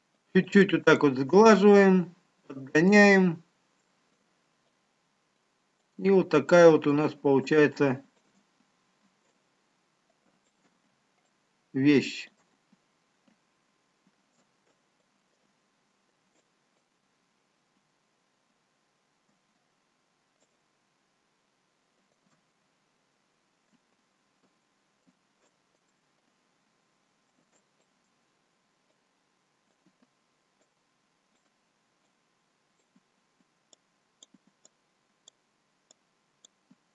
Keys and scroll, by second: 1.2 ctrl+w.